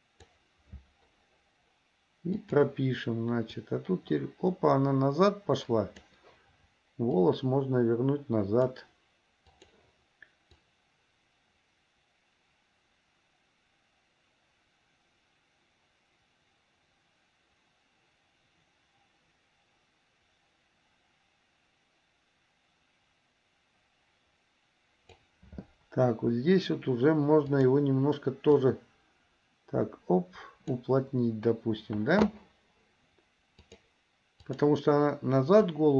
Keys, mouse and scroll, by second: 2.6 click, 3.7-6.3 drag, 7.2-8.8 drag, 9.7 click, 10.8-25.4 drag, 27.7 click, 28.8-30.9 drag, 33.8 click, 34.7 drag, 35.7-35.9 drag.